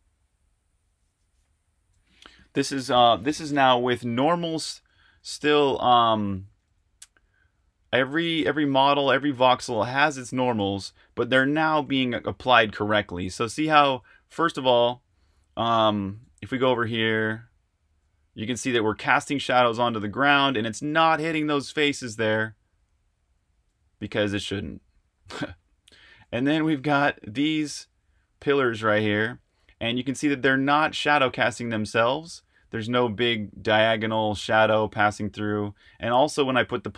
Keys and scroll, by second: 0.1 super+h, 0.8 super+h, 4.9-10.2 typing, 11.8-18.0 typing, 19.0-21.1 typing, 23.6 typing, 24.8-36.9 typing.